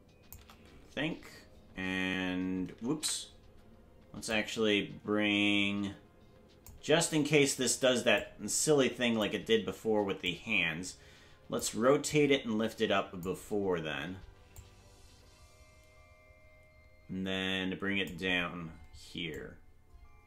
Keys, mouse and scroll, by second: 3.5 ctrl+7, 4.3 click, 8.2-9.3 drag, 10.2-11.6 shift+drag, 12.1-13.3 drag, 14.6-18.1 drag, 19.3-20.2 drag.